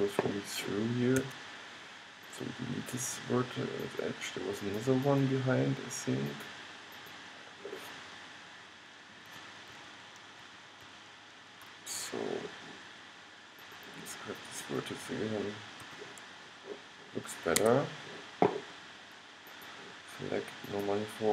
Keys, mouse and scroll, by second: 1.3 x, 9.9 super+z, 10.5 super+z, 10.9 super+z, 13.7-16.6 middle drag, 16.0 g.